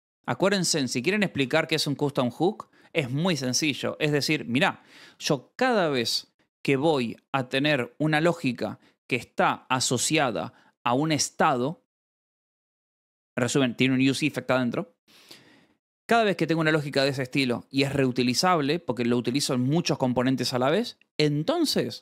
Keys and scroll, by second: 0.0-2.3 typing, 1.3 ctrl+s, 3.6 Escape, 4.0 ctrl+s, 5.0 shift+v.